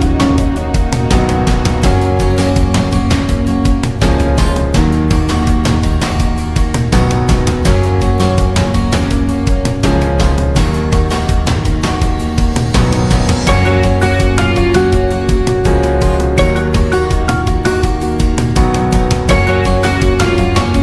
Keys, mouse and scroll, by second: 0.9 alt+scroll down 1, 1.1 space, 1.3 click, 1.6 space, 2.4 alt+scroll up 1, 3.1 alt+scroll up 1, 3.9 scroll down 1, 4.1 space, 4.3 click, 4.8 alt+scroll up 1, 5.0 space, 5.3-9.2 drag, 9.2 alt+scroll down 1, 9.4 space, 9.6 click, 9.8 space, 10.6-16.9 drag, 17.8 alt+scroll down 1, 18.0 space, 18.1 click, 18.4 space, 19.4-20.8 drag.